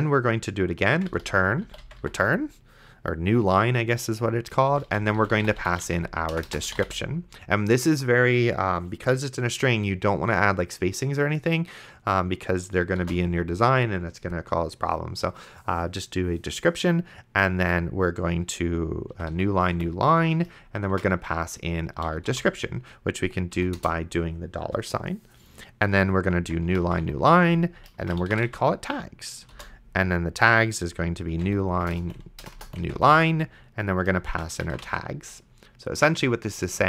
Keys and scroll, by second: 1.0-2.5 typing, 4.7-7.3 typing, 13.2 shift+;, 19.1-22.8 typing, 23.6 Down, 23.8 Return, 26.1-29.8 typing, 31.1-35.4 typing.